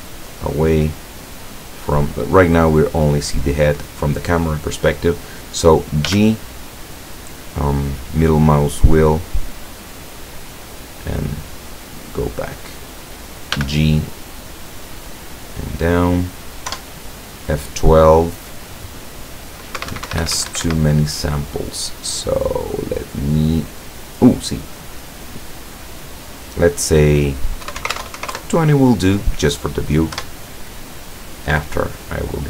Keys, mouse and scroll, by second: 0.1 click, 6.1 g, 12.1 click, 13.6 g, 15.9 click, 16.8 F12, 19.8 Escape, 21.6 click, 22.3-23.4 scroll down 3, 24.1 click, 27.7 KP_2, 27.8 KP_0, 28.0 Tab, 28.2 KP_0, 28.5 KP_Enter, 30.2 F12.